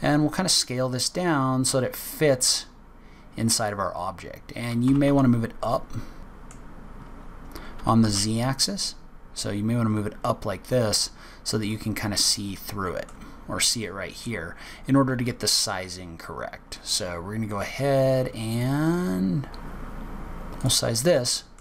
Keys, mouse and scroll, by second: 2.7-3.6 scroll up 5, 4.7 g, 6.2 middle click, 7.0-7.9 scroll down 7, 7.6 g, 11.8-12.2 scroll up 8, 12.4 middle click, 13.4 scroll down 1, 13.7 middle click, 14.4-14.7 scroll up 1, 15.0 s, 21.0 middle click.